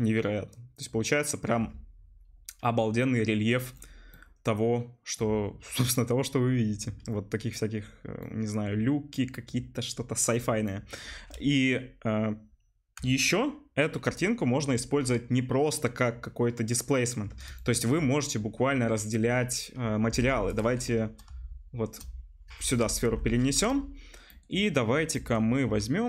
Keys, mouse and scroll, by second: 3.3 middle click, 4.0 right click, 4.5 click, 4.5-9.5 middle drag, 9.5 click, 10.1-17.4 right drag, 17.4 shift+middle click, 17.9-19.1 drag, 19.0-20.2 middle drag, 20.2 Delete, 20.2-21.4 drag, 20.5 middle click, 20.5 right click, 21.3 shift+s, 21.4-23.1 shift+right drag, 23.1 Delete, 23.1-26.0 drag, 26.0 middle click.